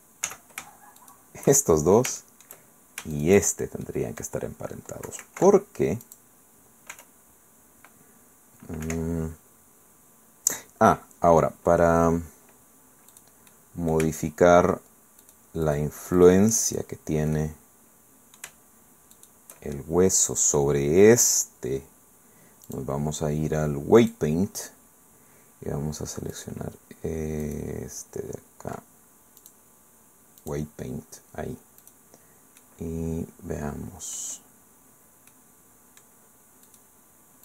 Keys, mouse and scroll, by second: 0.3 z, 1.6 shift+click, 2.1 shift+middle click, 2.2 shift+click, 2.8 shift+middle click, 3.1 shift+right click, 3.8 middle click, 4.1 click, 4.4-5.9 middle drag, 5.2 ctrl+p, 6.0 click, 6.9 r, 8.8 Escape, 10.7-11.0 scroll up 2, 11.0-11.8 scroll down 2, 11.8 scroll down 1, 13.1 right click, 13.5 right click, 15.2 shift+right click, 15.6 shift+right click, 16.2 shift+right click, 16.7 shift+right click, 17.3 middle click, 17.6-18.6 right drag, 18.6 shift+click, 19.1 shift+right click, 19.7-22.7 shift+middle drag, 22.7 click, 24.0 click, 26.3 right click, 26.6 middle click, 27.4 right click, 29.4 click, 29.7 middle click, 30.4 click, 31.8 right click, 32.6 middle click, 32.9-34.4 right drag, 34.4 middle click, 35.3 right click, 36.1 middle click, 36.7 right click.